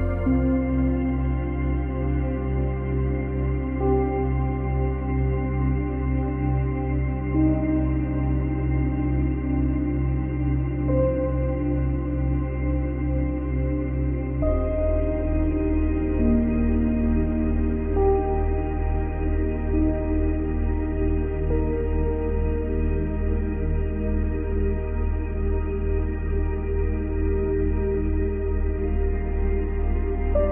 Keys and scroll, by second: 5.1 ctrl+c, 5.3 ctrl+v, 25.2 ctrl+z.